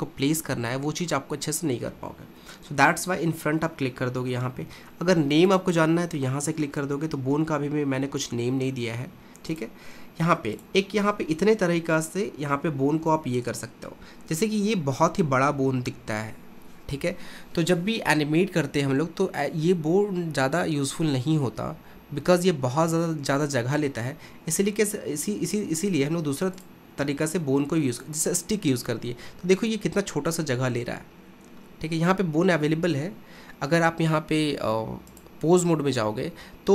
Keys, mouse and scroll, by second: 5.6 click, 9.5 click, 10.6-14.7 drag, 23.9-24.9 scroll up 1, 24.9-26.1 scroll down 2, 26.6-29.1 drag, 29.1-29.7 scroll up 1, 29.7-31.4 scroll up 1, 35.1-36.7 drag.